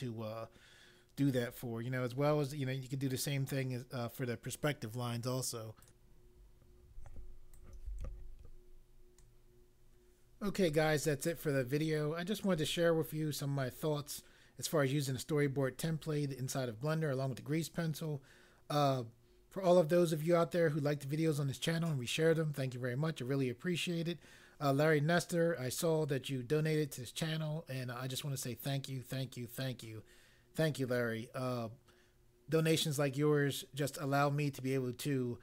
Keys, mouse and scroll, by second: 5.8 click, 7.5 right click.